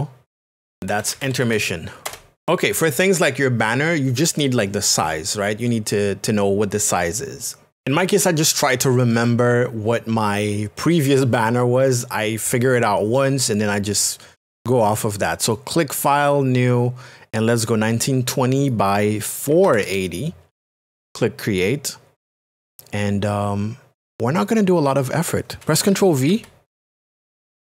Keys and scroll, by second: 0.5-1.9 typing, 2.0 Return, 19.5 KP_4, 19.8 KP_0, 26.3 v.